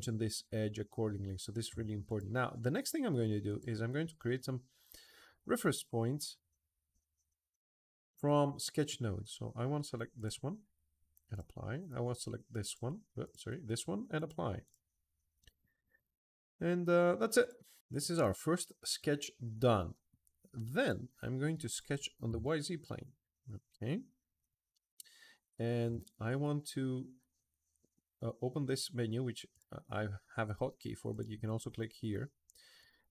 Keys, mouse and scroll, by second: 1.8 click, 3.2 click, 9.9 click, 11.1 click, 12.4 click, 13.0 click, 13.9 click, 14.4 click, 15.4 click, 15.7 click, 17.2 click, 18.4-19.9 middle drag, 20.5 click, 21.5 click, 22.2 s, 23.3 middle click, 29.3 click, 30.9 click, 32.6 click.